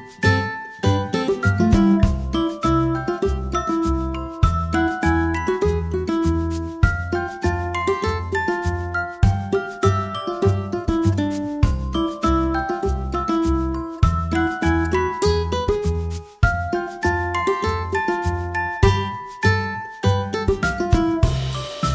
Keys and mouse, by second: 10.1 ctrl+p, 14.8 a, 15.5 g, 19.6 click, 20.7-21.4 middle drag, 21.4 right click.